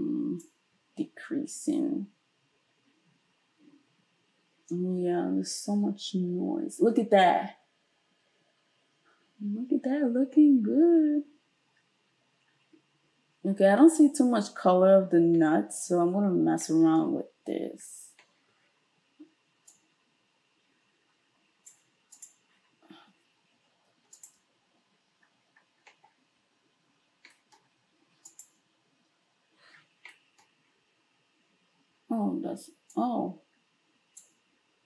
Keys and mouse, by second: 22.3-24.2 middle drag, 24.2 ctrl+shift+click, 24.2-28.3 ctrl+shift+middle drag, 28.3 ctrl+shift+click, 28.4-32.9 ctrl+shift+middle drag, 32.9-34.8 drag.